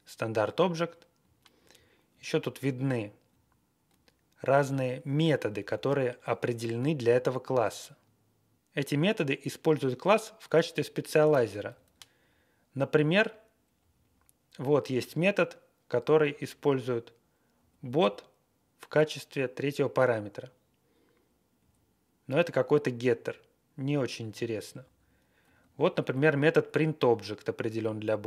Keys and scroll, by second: 1.2 Down, 1.4 Down, 1.5 Down, 1.5 Down, 1.7 Down, 1.9 Down, 2.0 Down, 2.0-2.5 Down, 2.6 Down, 2.7-3.1 Down, 3.9-4.3 Up, 5.6 Down, 6.8 ctrl+a, 11.3 Up, 11.5 Up, 11.6 Up, 11.8 Up, 12.2-13.1 Right, 12.5 Right, 12.6 Right, 12.7 Right, 12.7 Right, 12.8 Right, 13.0 Right, 13.7 Left, 14.0 Left, 16.1 Right, 16.3 Right, 16.5 Right, 17.5 Left, 17.8 Left, 17.9 Left, 21.5 Down, 22.6-23.2 Down, 23.8 Down, 24.3 Down, 24.5 Down, 24.5 Down, 24.7 Down, 25.4 Up, 26.1-26.5 Left.